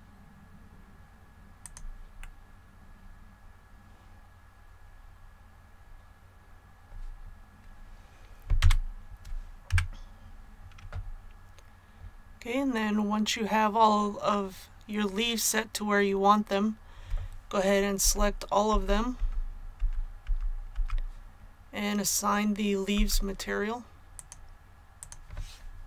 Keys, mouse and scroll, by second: 1.6 click, 2.1-7.4 middle drag, 8.5 a, 9.6 KP_1, 18.0-20.2 typing, 22.0-23.4 typing, 24.1 click.